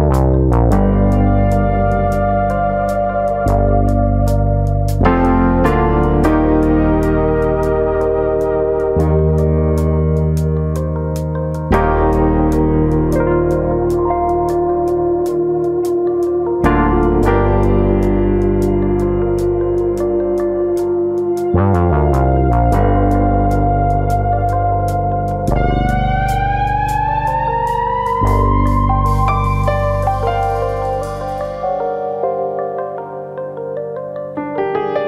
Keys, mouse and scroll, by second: 0.0 s, 0.6 click, 1.1 click, 1.2 shift+click, 1.8 click, 2.1 middle click, 2.9 shift+click, 3.1 shift+click, 3.1 middle click, 4.3 shift+click, 4.7 s, 5.2 click, 5.8 click, 6.5 shift+click, 6.5 middle click, 7.0 middle click, 7.6 shift+middle click, 7.6-8.3 scroll up 1, 8.3 click, 8.3 shift+middle click, 8.5 middle click, 9.5 ctrl+click, 9.7 middle click, 10.8 click, 11.7 middle click, 12.2 click, 12.5 middle click, 13.2 ctrl+click, 13.7 middle click, 14.3 click, 14.9 middle click, 15.3 middle click, 15.9 click, 16.1 middle click, 16.9 click, 17.5 middle click, 18.0 click, 19.2 middle click, 19.8 alt+click, 20.0 middle click, 20.5 click, 21.6 scroll down 2, 21.8 shift+middle click, 22.0 middle click, 22.2 Tab, 22.5 scroll down 2, 22.8 middle click, 24.4 KP_1, 25.6-26.0 scroll up 2, 25.8 middle click, 26.0 scroll down 1, 26.2-26.7 scroll up 2, 26.4 Tab, 26.7 middle click, 27.1 click, 27.3 middle click, 27.9 click, 28.9 middle click, 29.4 middle click, 30.4 middle click, 30.9 middle click, 30.9-31.4 scroll up 2, 31.4 click, 31.6 middle click, 32.1 click, 33.2 click, 33.8 click, 34.5 click, 34.9 middle click.